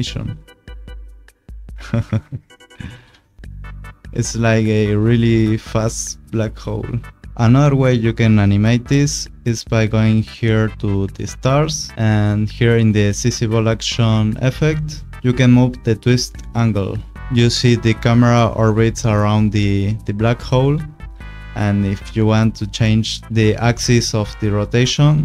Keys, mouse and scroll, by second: 2.7 click, 2.9 space, 5.2 click, 7.3 Scroll_Lock, 9.6 click, 12.6 click, 16.1 click.